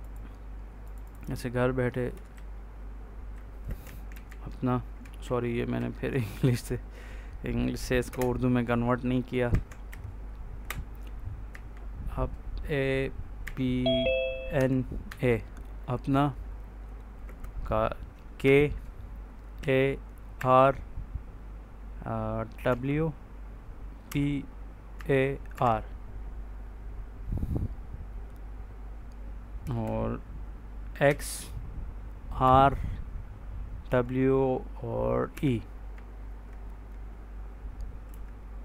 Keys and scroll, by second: 2.2 Right, 3.5-4.6 typing, 5.1 ctrl+z, 8.0 space, 9.4 F8, 9.8 Right, 11.4 a, 13.3 p, 14.5 n, 14.9 a, 17.1 space, 18.3 k, 20.2 r, 22.6 w, 23.9 b, 24.8 a, 25.4 r, 29.6 space, 30.9 x, 32.3 r, 33.7 w, 35.2 e, 38.0 k.